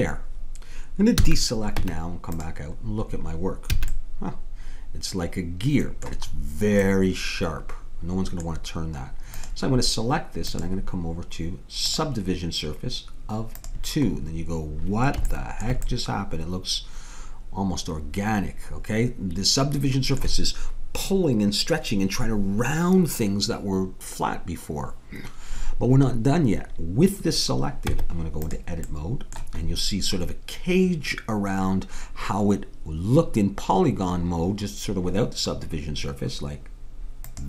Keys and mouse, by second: 1.2 a, 1.8 Tab, 3.8 a, 8.1-9.4 middle drag, 9.4-12.3 drag, 13.6-15.3 drag, 15.3-17.1 middle drag, 27.9 Tab, 28.9-34.9 middle drag, 37.3-37.4 drag.